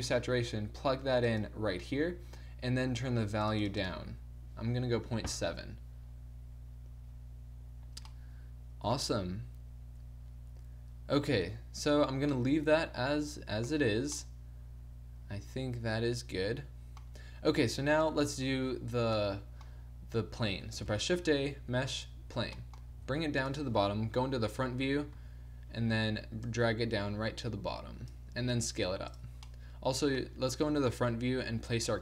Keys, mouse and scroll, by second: 1.5-3.0 drag, 3.0-5.8 middle drag, 18.0-19.2 drag, 19.2-20.9 middle drag, 20.9 shift+a, 22.6-24.2 middle drag, 23.0 g, 24.5 KP_1, 25.2 KP_5, 26.5-27.9 middle drag, 28.5 s, 29.5-31.1 middle drag, 31.0 KP_1.